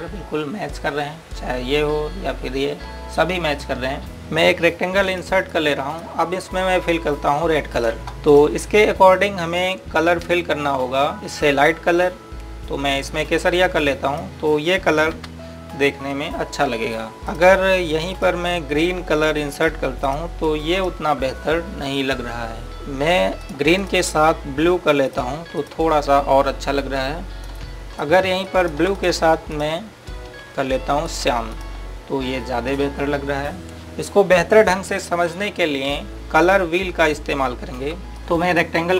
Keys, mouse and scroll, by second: 0.8 scroll down 1, 2.0-3.2 scroll up 1, 5.9 click, 12.0 right click, 14.0 click, 16.1 t, 18.2 click, 24.3 click, 29.4 ctrl+right click, 29.9 click, 37.4 click.